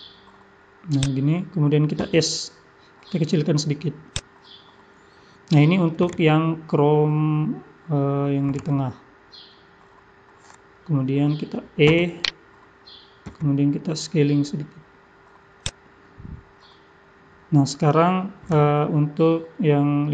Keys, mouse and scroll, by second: 2.0 s, 11.8 e, 13.3 s.